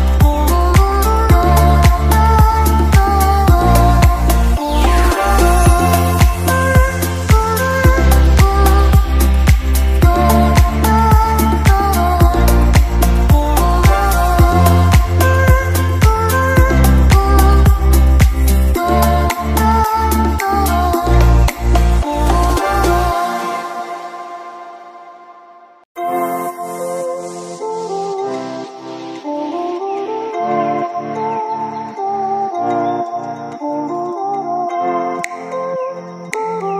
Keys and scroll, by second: 9.6 space, 22.3 space, 22.6 ctrl+z, 23.4-25.0 typing, 24.2 ctrl+z, 25.3 ctrl+-, 29.0 ctrl+z.